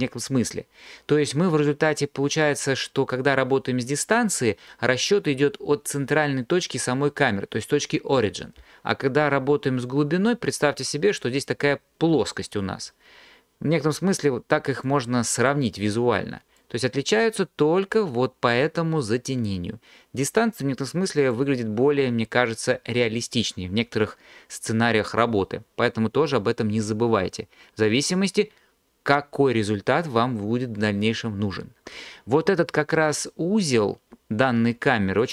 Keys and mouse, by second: 14.9 click, 16.6 drag, 20.6 click.